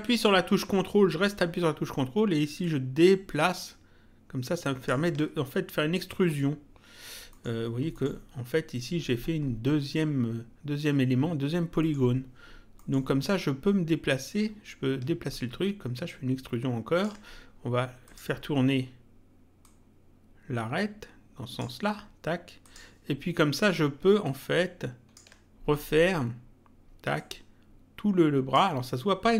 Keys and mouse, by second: 2.6 ctrl+click, 7.3 middle click, 11.8 middle click, 15.3 ctrl+click, 18.0 click, 19.6 click, 22.6 click, 24.2 ctrl+click, 27.1 click.